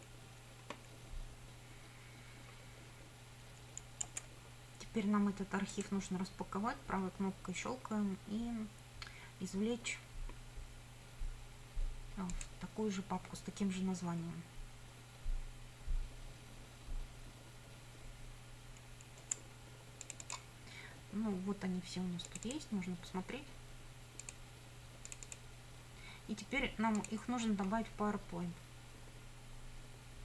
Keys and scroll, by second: 4.2 F9, 19.4 F9.